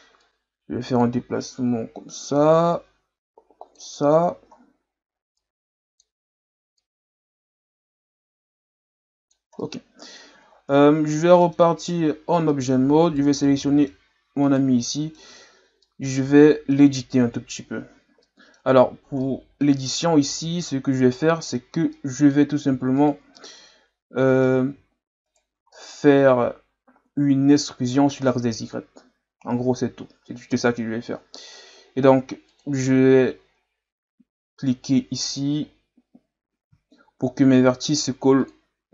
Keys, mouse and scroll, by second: 0.2-1.5 drag, 1.5 scroll up 1, 2.7-4.1 drag, 4.1 scroll up 3, 4.5-5.4 scroll down 1, 5.4-6.9 drag, 9.6 middle click, 10.5-11.0 scroll down 1, 11.1 middle click, 11.8 Tab, 12.5 middle click, 13.0 right click, 13.4-14.4 middle drag, 14.4 right click, 14.9 middle click, 15.3 Tab, 15.8-17.3 middle drag, 17.3 KP_Divide, 18.2 middle click, 18.8-19.3 scroll up 1, 19.3-20.3 middle drag, 20.3 alt+right click, 21.1-23.0 middle drag, 23.0 shift+right click, 23.4-25.3 middle drag, 25.3 shift+right click, 25.7-28.8 middle drag, 32.5-35.5 drag, 38.4 click.